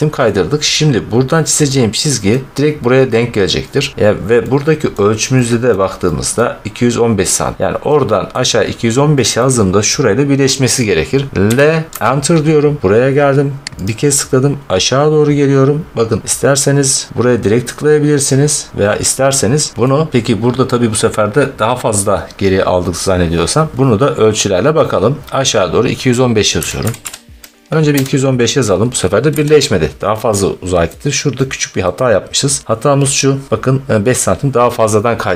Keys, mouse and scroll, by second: 0.1 middle click, 2.2 middle click, 4.8 middle click, 5.3-5.8 scroll, 6.2 scroll, 7.6 scroll, 8.2-8.7 scroll, 9.3 scroll, 11.4 l, 11.9 Return, 13.8 click, 16.0-16.3 scroll, 19.8-20.2 scroll, 26.4-26.9 typing, 27.8 Return, 28.1 typing, 29.2 Escape, 30.8 middle click, 31.7 middle click, 32.8-33.3 scroll.